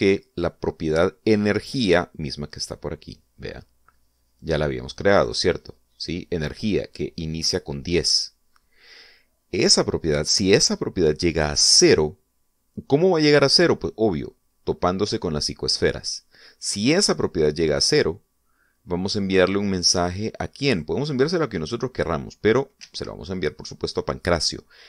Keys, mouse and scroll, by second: 5.5 click, 21.9 click, 24.0 Escape.